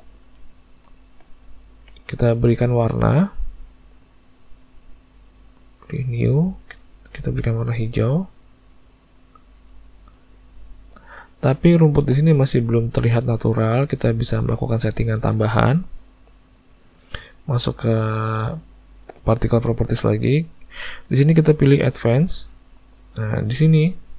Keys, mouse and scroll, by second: 0.2 middle click, 0.9 shift+middle click, 1.6 ctrl+middle click, 3.2 click, 5.9 click, 7.2 click, 11.0 middle click, 11.4 ctrl+middle click, 12.0 shift+middle click, 12.4 ctrl+middle click, 17.5 click, 22.4 click, 24.0 click.